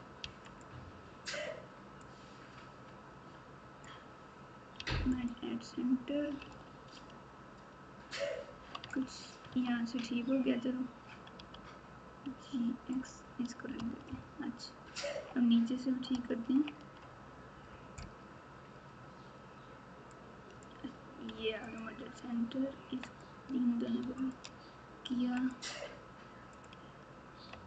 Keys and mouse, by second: 0.2 m, 2.0 click, 2.3-3.8 drag, 4.7 m, 6.4 alt+z, 7.0 alt+z, 8.8 Tab, 9.5 Tab, 11.3 g, 12.9 x, 14.0 ctrl+KP_2, 14.5 ctrl+KP_2, 16.5 ctrl+KP_3, 20.2 click, 21.3 m, 23.1 click, 24.2 shift+click, 25.0 m.